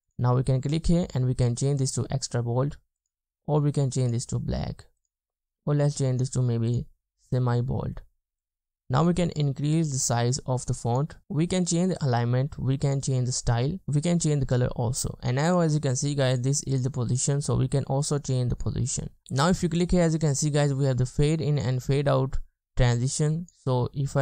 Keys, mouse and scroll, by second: 13.3 double click, 16.0 double click.